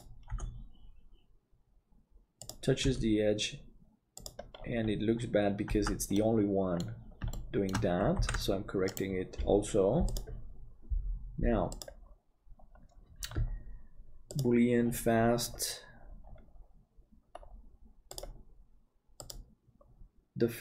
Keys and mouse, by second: 5.8 Tab, 5.8-6.8 middle drag, 7.3 shift+middle click, 7.6 click, 8.3 ctrl+s, 10.1-13.0 drag.